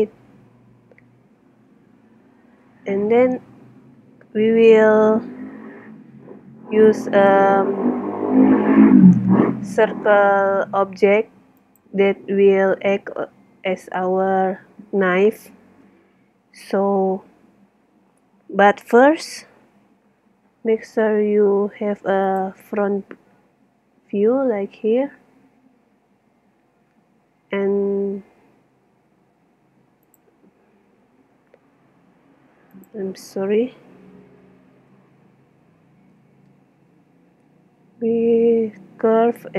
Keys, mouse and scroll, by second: 0.3 right click, 0.4-4.3 middle drag, 22.9 KP_1, 23.7-26.4 middle drag, 28.9 shift+Tab, 31.2 shift+a, 34.8 Tab, 36.4 shift+a.